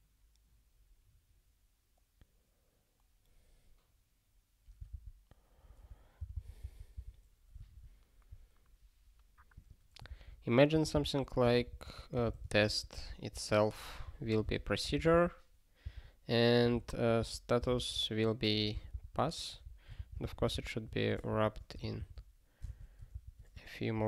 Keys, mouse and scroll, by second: 5.8 alt+f, 6.2 alt+b, 6.3 alt+b, 9.5 click, 10.0 ctrl+p, 10.7-13.3 typing, 14.0 ctrl+e, 14.5 alt+b, 15.8 Return, 16.6-18.2 typing, 18.7 alt+b, 18.9 alt+b, 19.2 ctrl+p, 20.0 ctrl+n, 20.2 alt+b, 21.3 (, 21.8 alt+shift+s, 23.1 ctrl+n, 23.9 (.